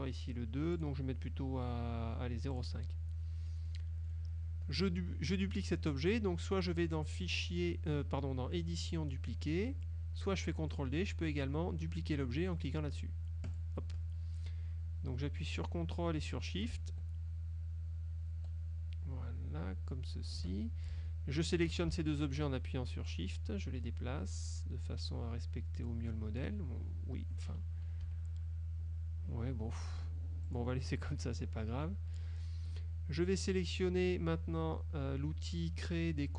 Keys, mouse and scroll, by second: 0.9 right click, 2.6 click, 3.5 middle click, 4.1 middle click, 4.4 click, 7.4 click, 10.9 click, 13.6 click, 15.7-20.6 drag, 22.2 shift+click, 23.2-26.7 drag, 28.1 Up, 30.5 click, 31.1 middle click.